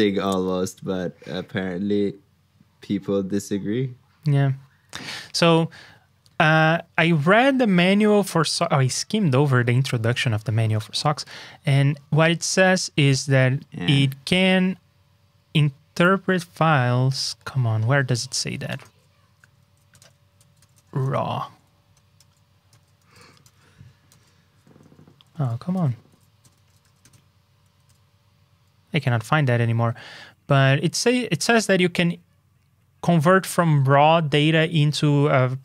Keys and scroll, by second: 19.6 super+z.